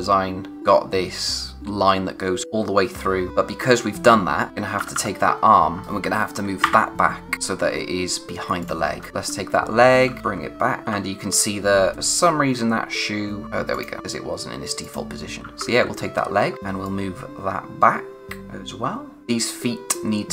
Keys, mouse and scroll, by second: 2.3-4.5 scroll down 1, 4.5 click, 4.7-5.7 typing, 5.3-5.7 scroll down 1, 5.8 scroll up 1, 8.6 click, 8.9 scroll down 1, 9.0 typing, 10.2 shift+Left, 10.8 ctrl+z, 12.6-13.4 scroll up 1, 13.2-13.9 typing, 13.7 click, 15.4 typing, 15.5 shift+Right, 16.8 click.